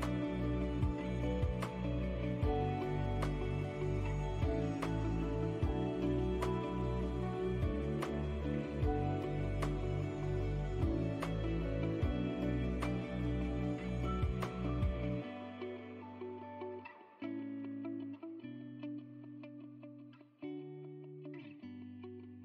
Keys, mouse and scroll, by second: 6.2 middle click, 7.2 click, 7.7-8.4 scroll up 2, 8.4 click, 8.9 middle click, 10.3 r, 12.6 scroll down 1, 13.2 click, 14.2 middle click, 15.0-15.4 scroll up 2, 15.4 middle click, 19.5 shift+click, 21.7 ctrl+l.